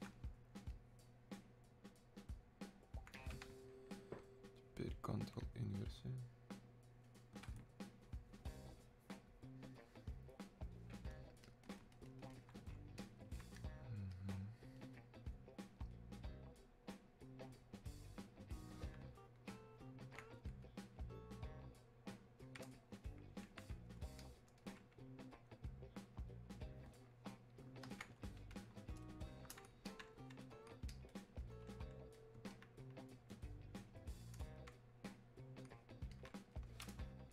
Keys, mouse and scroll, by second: 11.4-29.8 ctrl+drag, 29.8-36.1 alt+drag, 36.1-37.3 alt+drag.